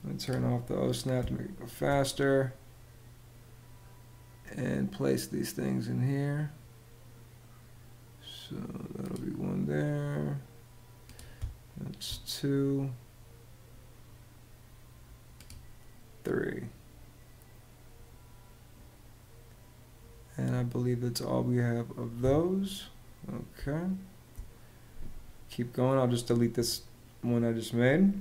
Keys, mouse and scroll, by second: 0.9 space, 11.1 space, 21.9 Escape, 23.2 space.